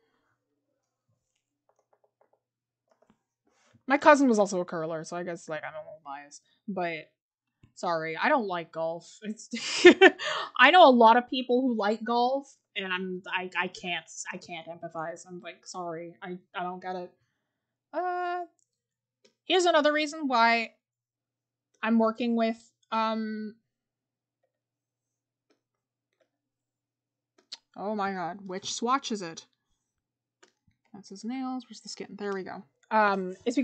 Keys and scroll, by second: 1.7-2.3 scroll down 1, 2.9 scroll up 1, 4.6 scroll down 1, 11.4 scroll up 1, 13.0-14.2 scroll, 14.6 scroll.